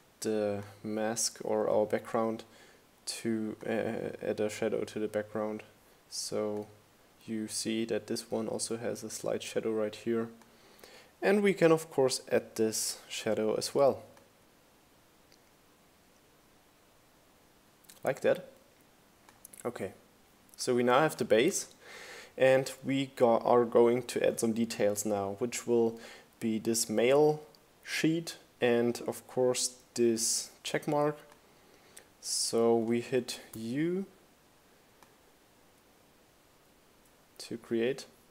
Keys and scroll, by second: 32.3 u.